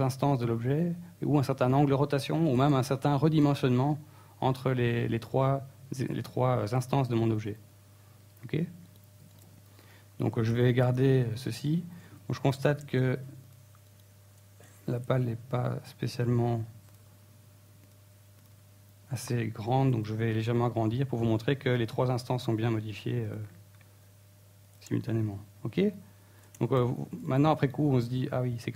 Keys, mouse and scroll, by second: 3.1 shift+middle click, 3.7-4.7 scroll up 2, 4.2 shift+middle click, 5.2 scroll down 1, 5.6 right click, 6.0 right click, 6.2 Tab, 6.4-6.8 scroll up 3, 7.8 KP_1, 8.5 shift+middle click, 9.1-9.4 scroll up 3, 9.5 ctrl+Tab, 10.5 alt+right click, 11.6 shift+s, 14.5 click, 15.4 shift+middle click, 16.4 ctrl+l, 17.0-17.3 scroll down 4, 17.4 s, 19.8 click, 20.0-20.4 scroll down 6, 20.4 s, 21.3 click, 21.4 Tab, 21.6 middle click, 22.6 middle click, 22.9 Tab, 23.2 shift+middle click, 23.7 right click, 23.8 Tab, 24.1 right click, 24.4 Tab, 24.9-25.2 scroll up 1, 25.2-27.6 typing, 25.8 right click, 26.0 click.